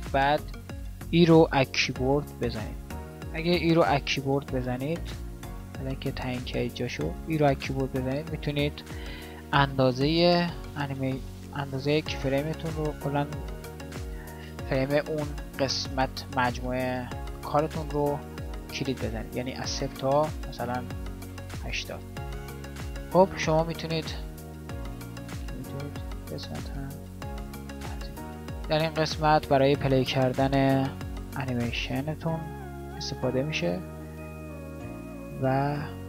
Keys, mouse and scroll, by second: 0.9 e, 19.2-21.0 drag, 21.0 e, 24.2 e.